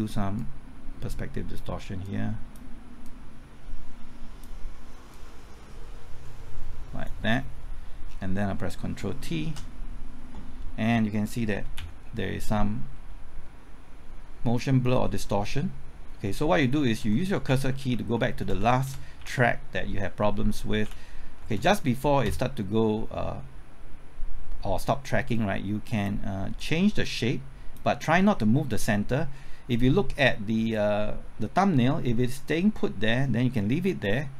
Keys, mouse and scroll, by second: 1.9-7.9 drag, 8.0 scroll down 1, 9.4 ctrl+t, 11.7 Left, 15.2-16.5 scroll up 1, 16.5 Left, 17.0 Right, 17.2-17.7 typing, 18.7 Right, 19.2 Left, 20.6-22.2 typing, 25.3-34.3 drag.